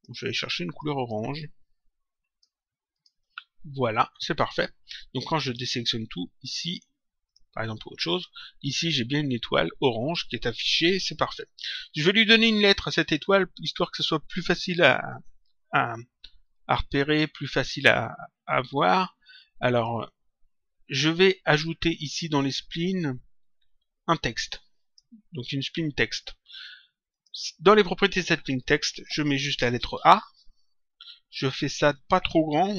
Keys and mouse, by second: 2.9 click, 5.4 click, 7.2 click, 18.6 click, 21.4 click, 27.1 click, 28.5 click, 29.8 shift+a, 31.9 click.